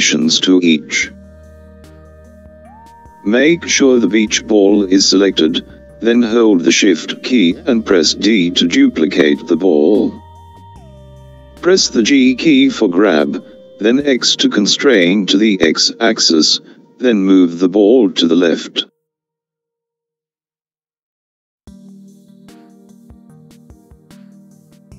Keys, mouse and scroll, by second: 6.5 shift+d.